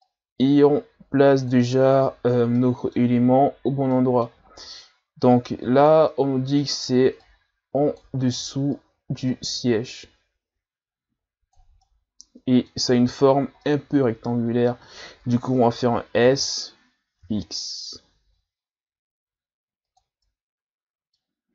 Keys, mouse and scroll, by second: 0.1-1.7 drag, 1.7-2.6 scroll down 3, 2.6 middle click, 3.5-3.9 scroll up 1, 3.9 middle click, 4.5-5.2 scroll up 2, 5.2 scroll up 1, 5.3 click, 6.1-7.2 middle drag, 7.2 click, 8.2 ctrl+z, 8.8-11.8 drag, 11.8-16.2 middle drag, 16.2 s, 20.2-21.5 middle drag.